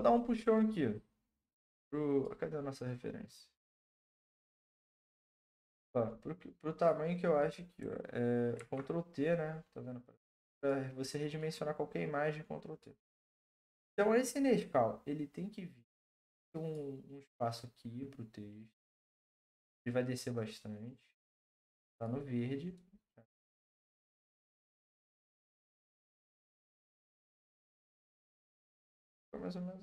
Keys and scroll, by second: 8.6 ctrl+t.